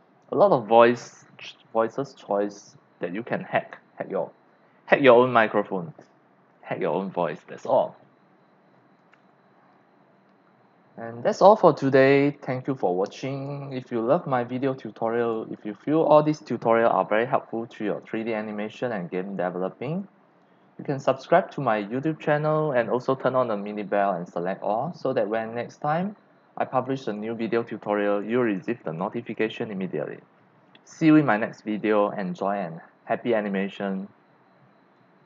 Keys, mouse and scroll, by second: 8.8 click, 10.1 click, 11.1 x, 11.2 click, 12.4 click, 12.6-30.9 typing, 12.8 click, 15.0 click, 15.6-21.1 drag, 28.6-30.1 drag, 31.8-33.2 drag, 33.9 click, 34.9 click.